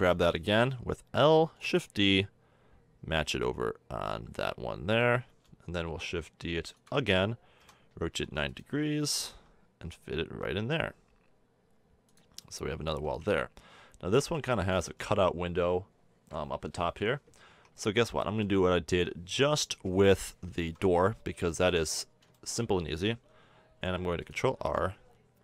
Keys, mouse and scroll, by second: 0.0 l, 1.5 shift+d, 2.1-4.7 drag, 6.6 shift+d, 7.6 r, 9.3 g, 12.4-13.5 middle drag, 12.9 z, 14.5 middle click, 15.2 middle click, 17.5 Tab, 18.0 middle click, 18.5 Tab, 19.4 KP_1, 20.6 z, 21.0-21.5 middle drag, 21.7-22.4 middle drag, 23.8 ctrl+r.